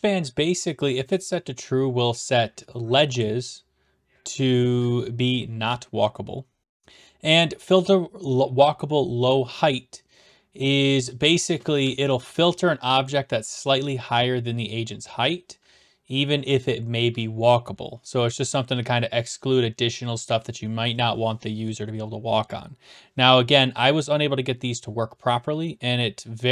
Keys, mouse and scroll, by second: 11.3-12.5 typing, 12.4 right click.